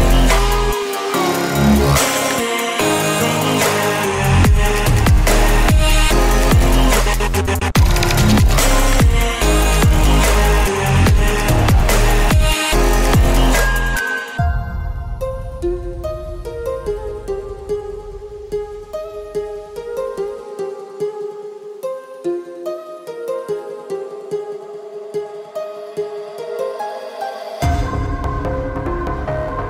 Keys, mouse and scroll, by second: 0.0-1.2 typing, 1.6 Return, 2.0 Return, 2.3 s, 2.5 h, 2.6 o, 2.9 e, 3.4 Return, 4.6-6.3 typing, 7.3 click, 8.4 space, 11.3 click, 11.9 Return, 15.1 click, 15.8-18.7 drag, 19.0 ctrl+c, 19.1 Right, 19.6 Return, 20.2 ctrl+v, 20.9 click, 22.0-25.0 typing, 22.4 Return, 25.0 click, 26.1 u, 26.2 i, 26.8 shift+-, 27.4 Return, 28.1-29.6 drag.